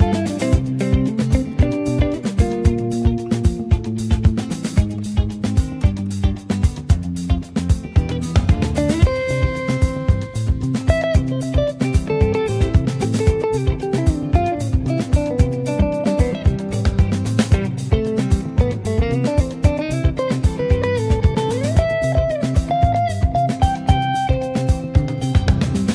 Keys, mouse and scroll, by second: 0.0 ctrl+space, 0.4 middle click, 0.9-1.3 scroll up 3, 1.3 middle click, 1.8 scroll down 1, 2.1 shift+middle click, 2.7 ctrl+s, 3.1 click, 6.3 click, 6.9 middle click, 7.3-8.7 scroll up 2, 7.5 shift+middle click, 8.7-9.6 scroll up 1, 9.6 scroll up 1, 9.8 click, 10.3-11.2 scroll down 6, 10.9 click, 11.2 middle click, 11.6 scroll down 1, 11.8 shift+middle click, 12.0 scroll up 1, 12.2-13.6 middle drag, 13.6 click, 13.8 n, 15.2-17.3 drag, 17.3-17.9 scroll up 2, 17.9 shift+middle click, 18.2-19.3 scroll down 2, 19.3-20.4 drag, 20.4 space, 21.0 space, 21.5 click, 22.6-25.9 drag.